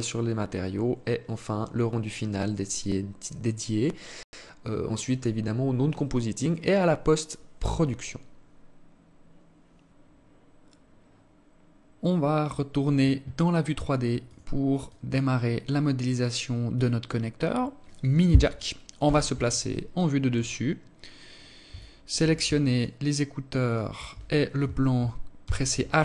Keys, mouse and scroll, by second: 14.4 click, 18.3 KP_7, 19.2-19.5 scroll down 6, 19.9-20.2 scroll down 2, 20.2 scroll up 1, 21.0 alt+shift+click, 22.0 shift+right click, 22.8 shift+right click, 24.6 h.